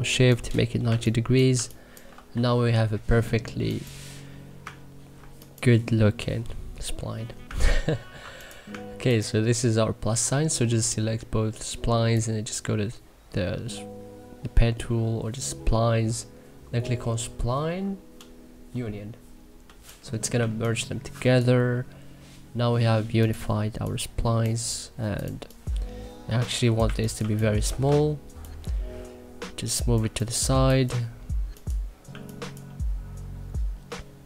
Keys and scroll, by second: 0.8 2, 2.3 e, 20.3 2, 26.8 1, 27.2 2, 27.8 e, 29.9 1, 30.4 2.